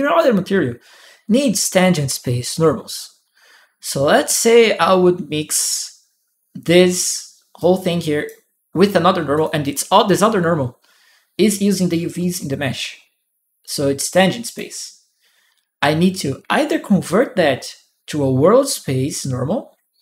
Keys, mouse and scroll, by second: 6.8 click, 7.8 click, 9.1 click, 13.4 click, 13.5 right click.